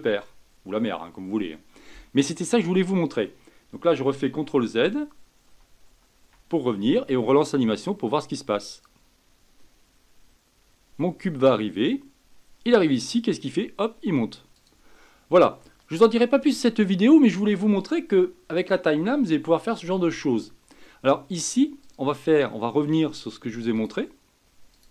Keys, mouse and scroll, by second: 4.3 ctrl+z, 4.8 ctrl+z, 5.9 ctrl+z, 7.7 click, 8.7 click, 14.5-17.5 drag, 21.8-24.9 drag.